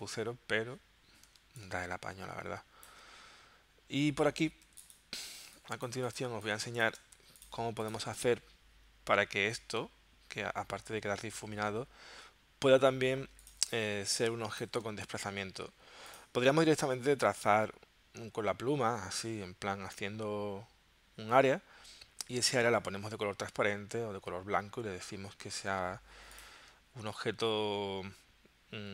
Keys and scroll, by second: 1.4 space, 4.6 z, 5.3 space, 6.2 space, 7.2 v, 13.2 z, 13.9 space, 15.1 v.